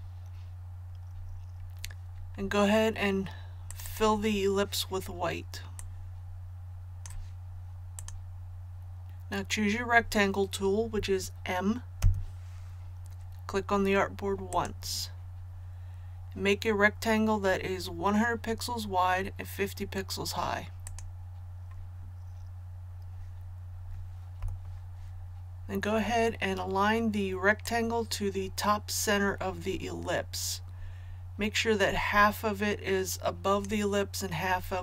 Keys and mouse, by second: 12.0 m, 14.5 click, 24.4 v, 27.6-34.3 drag.